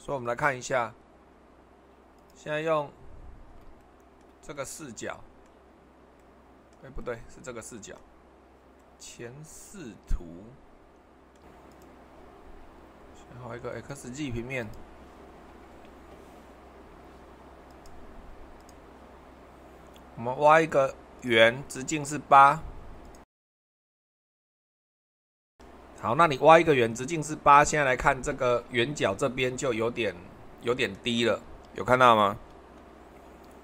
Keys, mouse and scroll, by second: 0.0 super+2, 2.1 click, 3.0-8.5 middle drag, 8.8-13.5 middle drag, 13.9-16.8 drag, 24.6 r, 25.0 8, 25.0 /, 25.0 2, 29.2-31.5 middle drag, 32.5 super+1.